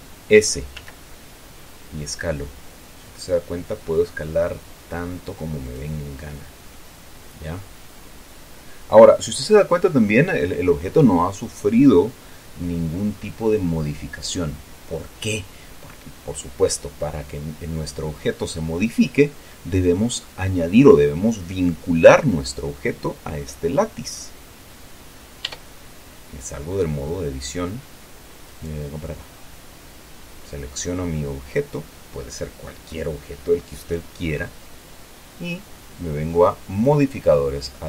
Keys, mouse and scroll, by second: 1.1 s, 6.0 click, 6.6-7.1 scroll down 1, 7.1-10.0 middle drag, 25.8 Tab, 28.8 right click, 37.1 click.